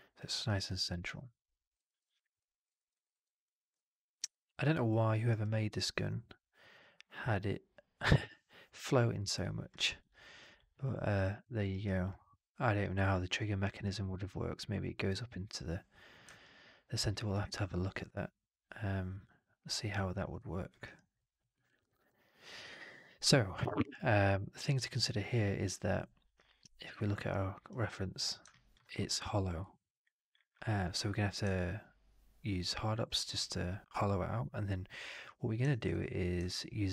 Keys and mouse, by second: 0.2 alt+right drag, 0.4 alt+right drag, 0.7-1.6 alt+drag, 1.7 middle drag, 1.9 right drag, 2.3 alt+drag, 2.6 alt+middle click, 2.8 alt+right click, 3.0 alt+right drag, 3.3-5.0 alt+drag, 5.2 alt+right drag, 5.3-5.8 alt+drag, 9.7 alt+middle drag, 9.9-10.3 alt+right drag, 10.4-11.3 alt+drag, 11.6 alt+right drag, 12.0-12.8 alt+drag, 16.3-20.6 alt+drag, 20.7 alt+right drag, 21.0 alt+drag, 21.4 alt+middle drag, 21.5 alt+right drag, 21.7 alt+right click, 21.9-23.4 alt+drag.